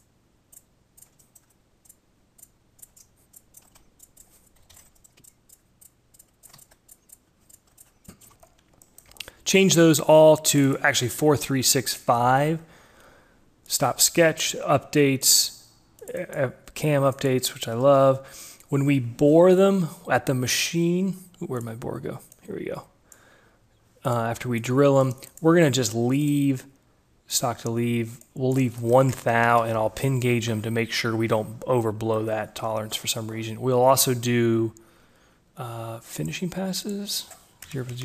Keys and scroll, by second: 3.6 d, 4.6 /, 4.8 6, 4.9 Return, 6.2-7.6 typing, 7.0 ctrl+a, 7.2 Delete, 7.9 Return, 11.5 Return, 17.2 ctrl+g, 28.3 ctrl+a, 28.9 0, 29.3 1, 36.9 0, 37.5 Delete, 37.7 0.